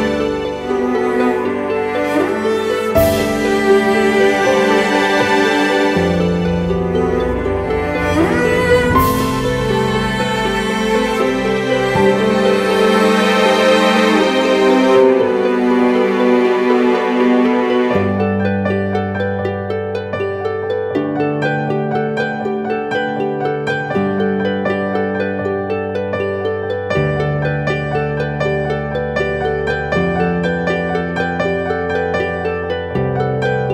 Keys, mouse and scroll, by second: 2.5 Return, 9.1-9.6 typing, 11.0 double click, 14.4 ctrl+z, 15.6 double click, 17.3 ], 17.6 ], 17.7 ], 17.9 ], 32.8 shift+click.